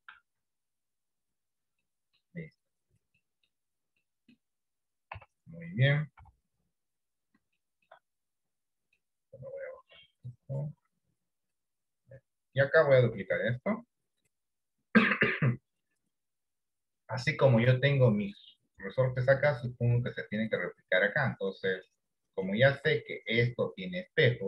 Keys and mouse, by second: 0.1 r, 2.0 middle click, 3.3 middle click, 4.1 middle click, 5.1 KP_1, 6.3 KP_3, 7.9 shift+middle click, 10.4-11.7 drag, 13.5 shift+d, 17.4-18.5 middle drag, 19.5-20.5 middle drag, 21.3 middle click, 22.6 shift+middle click.